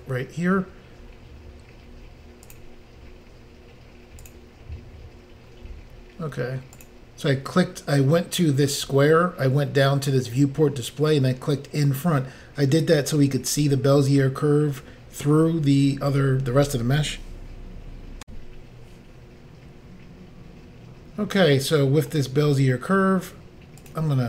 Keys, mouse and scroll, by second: 2.5 click, 4.2 click, 4.3 click, 5.5 scroll down 1, 6.8 click, 8.0 click, 18.2 Insert, 21.0-21.5 scroll down 1, 21.5 middle click, 21.6 scroll down 1, 22.2 scroll up 1, 22.5 scroll down 1, 23.8 click, 24.0 click.